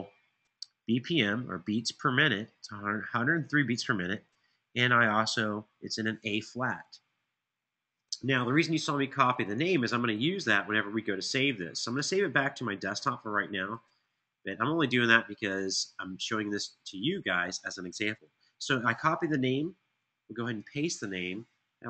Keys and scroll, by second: 19.8 super+v.